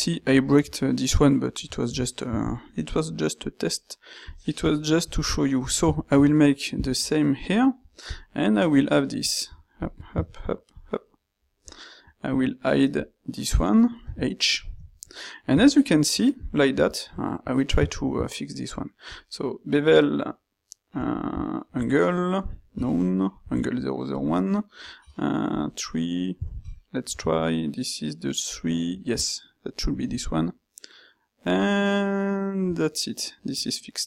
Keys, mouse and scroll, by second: 1.7 middle drag, 1.9 middle drag, 3.7-5.3 drag, 10.2 shift+z, 14.1 h, 17.8 ctrl+shift+q.